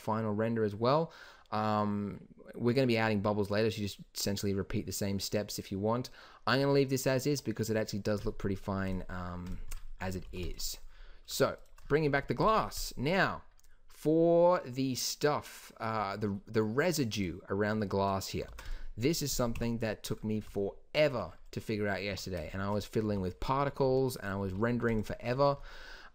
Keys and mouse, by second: 8.8-9.8 drag, 10.2 shift+b, 12.1 z, 18.4 ctrl+s, 19.5 KP_1, 22.1 Tab, 23.4 a, 23.8 z, 24.4 z.